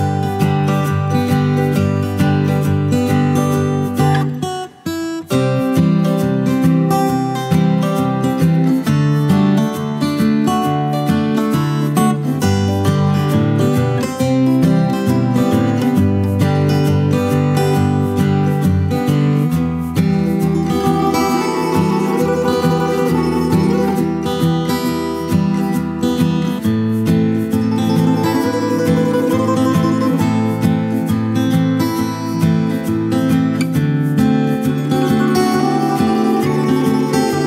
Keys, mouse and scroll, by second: 5.5 F8, 11.2 alt+shift+click, 21.6 Tab, 22.9 alt+click, 24.2 alt+click, 24.5 alt+double click, 25.0 alt+click, 25.3 alt+click, 26.7 shift+click, 27.1 alt+click, 27.3 alt+shift+click, 27.6 ctrl+alt+click, 27.9 alt+click, 30.8 space, 31.1 ctrl+alt+click, 31.7 alt+click, 32.5 alt+click, 33.9 alt+shift+click, 35.2 ctrl+click, 36.0 shift+click.